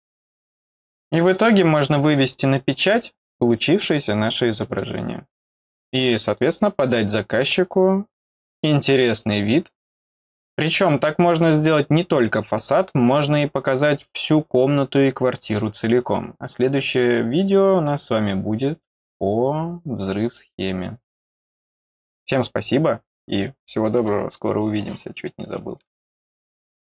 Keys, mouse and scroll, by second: 0.5 middle click, 1.1 click.